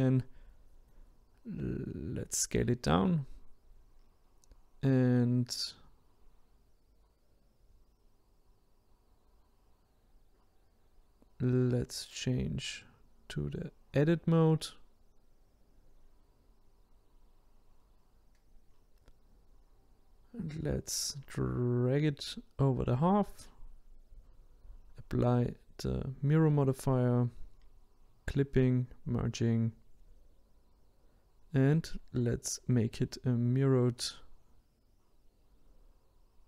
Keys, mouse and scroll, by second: 1.0 s, 2.8 click, 3.8 click, 6.6 ctrl+z, 12.1-13.2 scroll up 1, 13.2 click, 14.6 ctrl+z, 16.1-18.8 drag, 20.4 click, 23.1 click, 24.0-27.0 drag, 29.8 click, 32.2 click, 34.3 click.